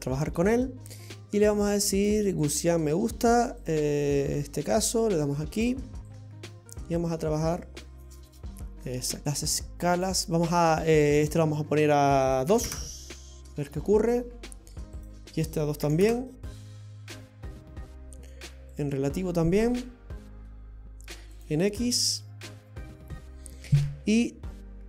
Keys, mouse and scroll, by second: 0.1-0.8 scroll up 5, 1.9 click, 3.6 click, 4.7 click, 6.1 click, 9.2 scroll up 2, 9.3 click, 11.2 click, 15.0 click, 18.8 click, 21.4 click, 23.7-24.4 scroll up 2.